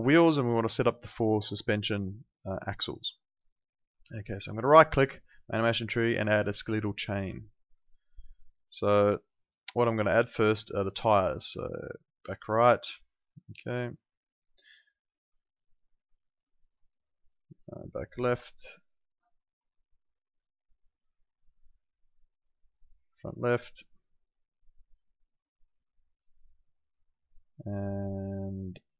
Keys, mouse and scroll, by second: 4.4 right click, 7.9 click, 12.3 click, 13.8 right click, 15.0 click, 19.4 right click, 21.0 click, 25.2 right click, 26.2 click.